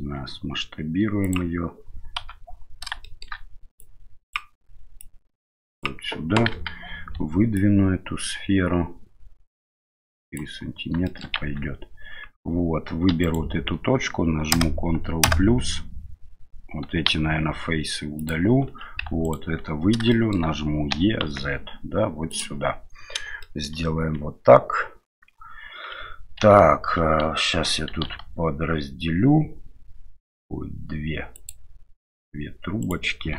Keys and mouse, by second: 2.2 KP_7, 3.1 shift+middle click, 3.8 click, 5.1 click, 6.5 KP_1, 7.7-10.4 drag, 11.0 shift+middle click, 11.4 Tab, 13.1 1, 13.2 right click, 14.5 ctrl+KP_Add, 15.2 ctrl+KP_Add, 17.1 x, 18.7 2, 19.2 alt+right click, 20.1 shift+middle click, 20.9 e, 23.5 shift+middle click, 26.4 ctrl+e, 27.9 ctrl+r.